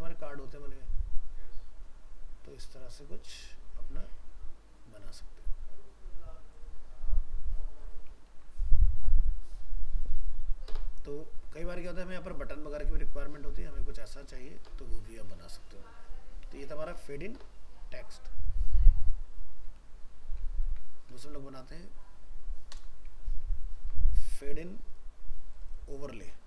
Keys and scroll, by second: 8.3 ctrl+w, 20.6 ctrl+c, 23.2 ctrl+v.